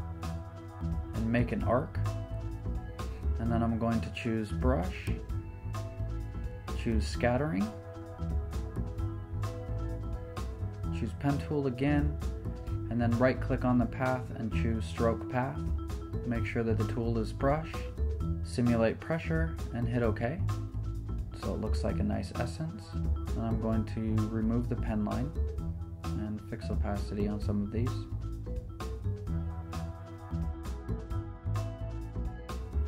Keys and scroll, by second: 3.4 b, 12.9 [, 14.0 p, 19.7-20.6 typing, 20.4 Return, 22.4 Return, 22.4-25.1 typing, 28.7 p, 30.0 super+z.